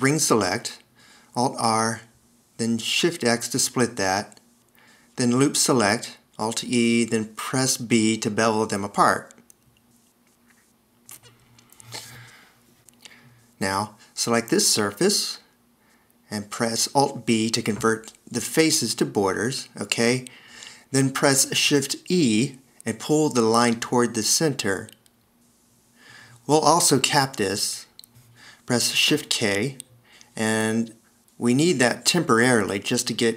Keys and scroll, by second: 1.4 s, 2.8 alt+r, 4.1 shift+x, 6.2 alt+e, 8.5 b, 16.3 d, 18.0 alt+b, 22.5 shift+e, 28.3 d, 29.4 shift+k.